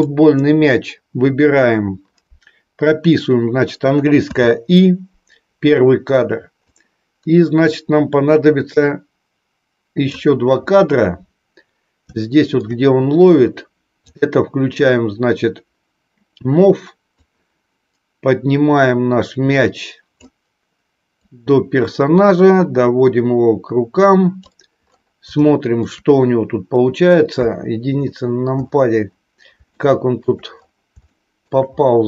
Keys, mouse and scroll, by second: 0.0 click, 6.8-10.2 drag, 12.1 shift+middle click, 14.1-20.4 drag, 21.1-24.5 drag, 25.4 shift+middle click, 27.4 KP_1, 29.7 shift+middle click, 31.1-31.5 shift+scroll up 1.